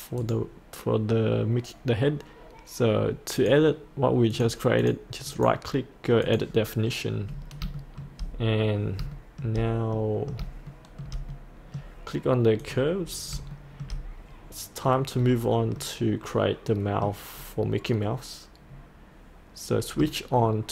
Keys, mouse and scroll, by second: 0.2 right click, 3.4 click, 5.3 right click, 6.3 click, 7.3-7.6 scroll down 1, 7.8 shift+middle click, 9.2 shift+middle click, 9.9 middle click, 10.7 shift+middle click, 11.4 middle click, 12.6 click, 13.6 shift+middle click, 15.2-15.8 scroll up 1, 15.8 middle click.